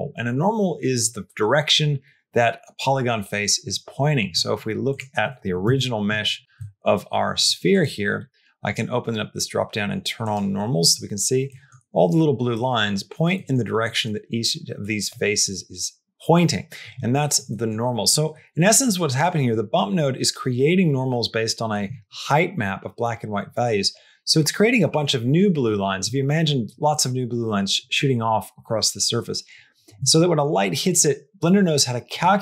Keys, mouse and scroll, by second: 5.5 Tab, 6.5 middle click, 7.2 click, 7.6 click, 8.0 click, 8.6-10.6 drag, 11.3 middle click, 12.4 middle click, 13.2 middle click, 13.7 middle click, 17.3 middle click, 18.7 click.